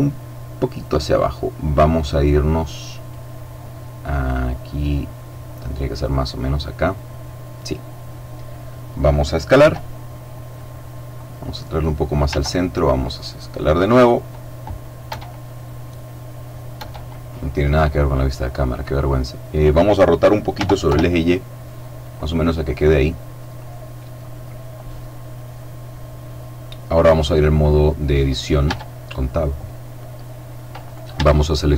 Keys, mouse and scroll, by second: 1.8-3.4 middle drag, 3.4-4.1 scroll down 1, 4.1-4.8 scroll up 1, 4.8-6.7 drag, 6.5 middle click, 8.2 middle click, 9.6 s, 10.5 click, 11.2 click, 12.2 s, 13.9 click, 15.0 KP_0, 16.7 KP_0, 20.5 r, 20.8 y, 22.0 click, 23.8 middle click, 24.4 middle click, 25.5-27.5 middle drag, 28.6 Tab, 30.8 shift+right click, 31.6 shift+right click.